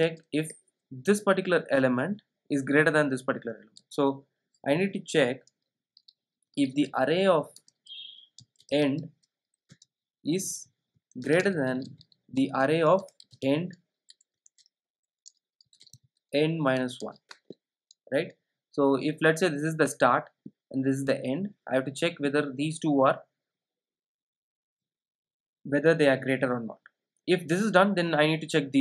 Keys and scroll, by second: 7.6 Return, 12.4 Return, 16.8 super+z, 17.8 Return.